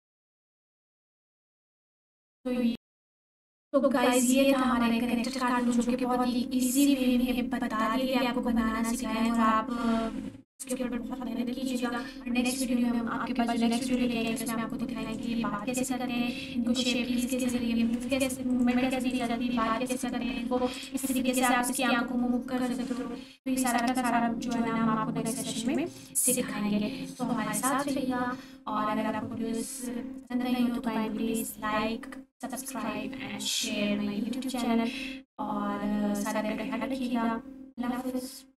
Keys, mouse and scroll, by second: 3.2 alt+q, 5.2-7.1 scroll up 1, 9.0 scroll down 1, 9.8-10.4 scroll up 1, 10.5-11.7 alt+shift+drag, 14.2-15.1 alt+scroll down 2, 15.1 click, 15.4 g, 18.5 right click, 19.1-20.1 alt+drag, 20.7 scroll up 1, 20.8-21.4 alt+shift+drag, 24.6-25.8 alt+drag, 38.4 alt+Num_Lock.